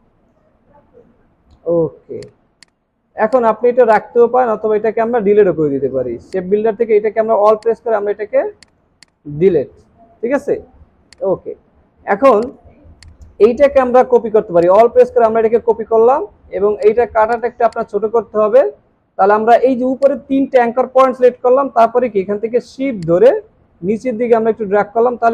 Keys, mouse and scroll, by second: 1.0 alt+scroll up 1, 3.0 alt+scroll down 1, 3.2 space, 7.6 alt+click, 10.8 alt+scroll down 1, 11.1 space, 14.6 alt+click, 19.4 alt+scroll up 1.